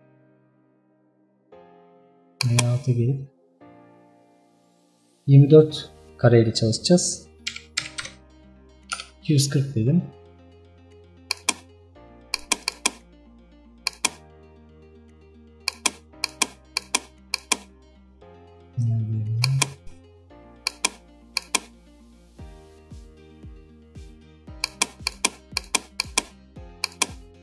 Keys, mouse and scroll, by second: 0.9-2.4 scroll down 7, 2.4 click, 16.7 click, 19.4 click.